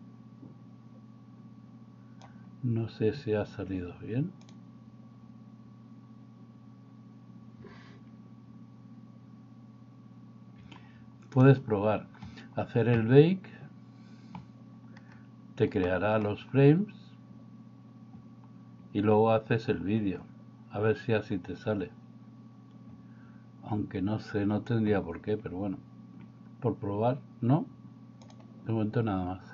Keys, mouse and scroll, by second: 10.6 Escape, 15.9 middle click.